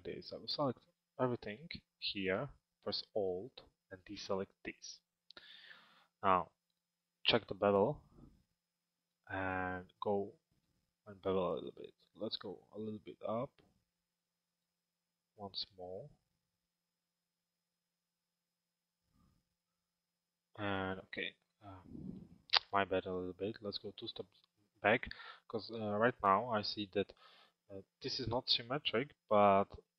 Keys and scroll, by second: 29.0 p.